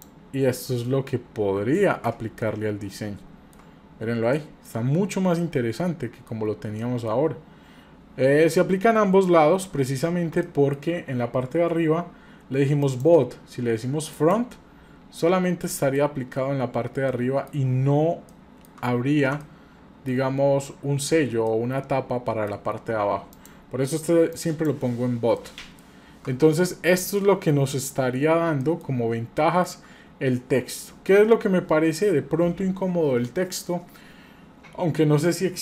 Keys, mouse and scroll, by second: 0.6-1.2 scroll down 2, 1.2-1.5 scroll up 2, 1.8 ctrl+middle click, 2.4-3.6 shift+middle drag, 3.9-4.3 scroll down 2, 4.3 middle click, 4.8-5.4 scroll up 1, 5.4 middle click, 5.4-6.0 scroll up 1, 6.4-6.8 scroll down 1, 6.8 middle click, 8.6-9.3 scroll up 2, 9.3 scroll down 1, 9.8 scroll down 1, 10.5 shift+middle click, 11.2-11.9 scroll up 5, 12.8-14.3 drag, 12.8 scroll up 1, 15.6 middle click, 16.7-17.1 scroll down 1, 17.1 middle click, 17.9 shift+scroll up 1, 18.3 shift+middle click, 18.8-19.3 scroll up 1, 19.4-20.1 shift+middle drag, 21.4-22.5 middle drag, 23.3-24.6 drag, 25.4 middle click, 26.1-26.6 shift+scroll down 4, 26.6-27.0 middle drag, 27.2-27.5 shift+middle drag, 27.8 middle click, 28.0-28.6 scroll down 2, 28.6 shift+middle click, 29.4 shift+middle click.